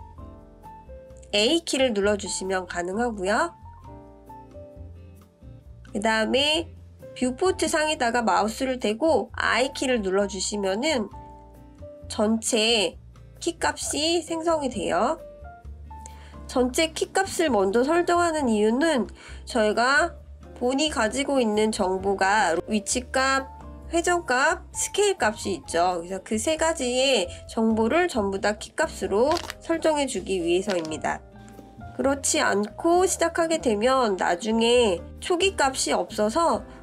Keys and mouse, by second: 5.1 i, 8.5 click, 11.8-13.5 drag, 16.5-18.0 drag, 19.1 click, 20.5 click, 21.4 ctrl+z, 22.3 click.